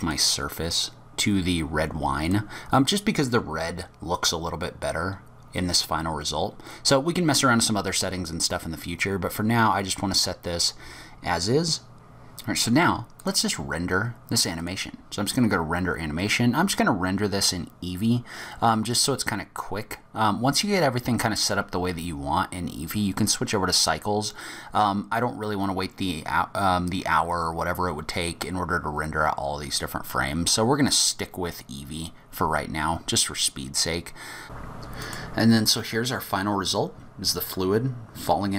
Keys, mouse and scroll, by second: 0.0 click, 4.2 click, 11.9 click, 13.2 click.